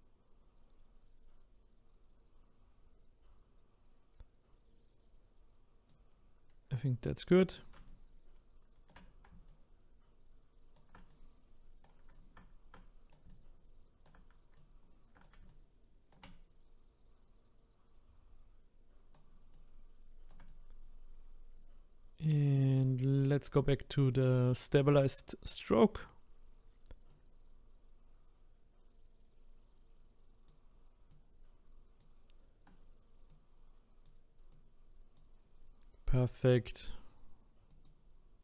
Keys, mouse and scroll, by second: 7.9-23.6 shift+right drag, 13.3 ctrl+Right, 14.5 ctrl+Right, 24.0-37.6 drag, 37.7-38.4 drag.